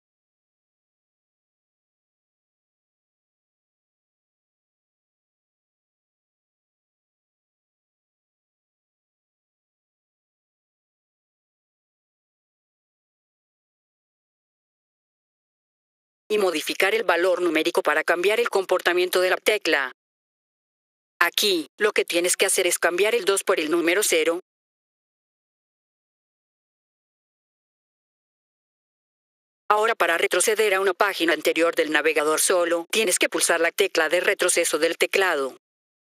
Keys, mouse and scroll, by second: 1.6 click, 3.5 click, 4.1 ctrl+v, 4.9-5.6 drag, 8.3 F4, 11.7 click, 14.1 click, 15.2 F4, 16.1 click, 19.0 click, 19.5 click, 24.6 click, 26.7-27.1 scroll down 1, 27.6-28.7 drag, 29.6 click.